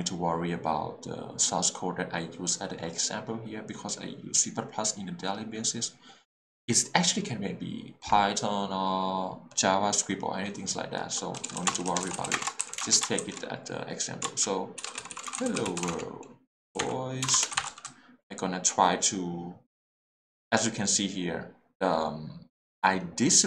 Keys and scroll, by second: 11.4-12.3 typing, 14.8-17.8 typing.